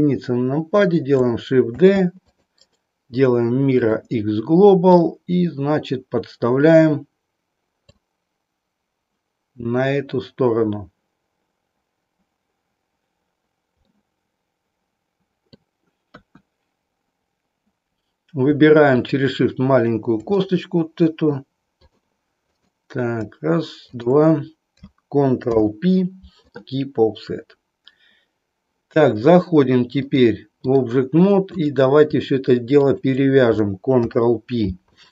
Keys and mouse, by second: 1.7 shift+d, 4.9-7.9 drag, 13.9-15.7 middle drag, 16.1 KP_1, 18.9 click, 20.4-21.4 middle drag, 21.7 click, 25.5 ctrl+p, 29.9-30.9 drag, 31.6 click, 34.0 ctrl+p.